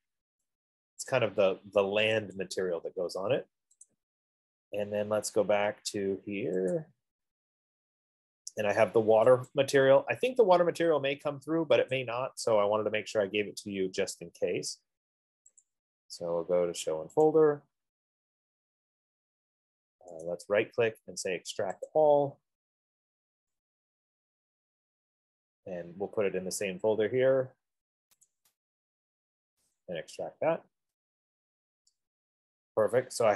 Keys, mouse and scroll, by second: 1.5 click, 2.7 click, 4.3 click, 7.0 click, 9.8 click, 12.3 click, 15.9 click, 17.7 click, 20.5 right click, 21.7 F15, 22.4 click, 23.9 click, 28.8 click, 30.4 click.